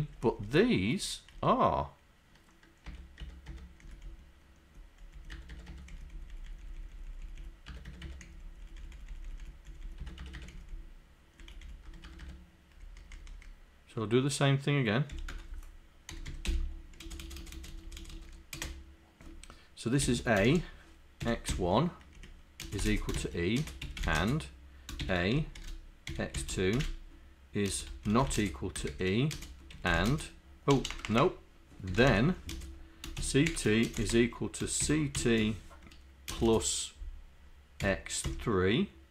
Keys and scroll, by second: 0.2 Right, 2.9 Tab, 3.3 Tab, 3.8 Down, 4.1 Left, 4.7 Left, 5.1 Left, 5.4 Tab, 5.6 Tab, 6.0 Down, 6.1 Left, 6.3 Left, 7.1 Left, 7.7 Tab, 8.1 Tab, 8.5 Left, 8.8 Left, 9.3 Left, 9.7 Left, 10.2 Tab, 10.6 Down, 10.8 Left, 12.1 Tab, 12.8 Up, 13.2 Up, 15.2 End, 15.4 Return, 16.1-18.6 typing, 20.1 shift+a, 20.5 shift+0, 21.3 z, 22.2 Right, 22.7-32.8 typing, 33.9 =, 34.1 space, 35.2 r, 36.3 space, 36.4 KP_Add, 36.5 space, 37.8 x.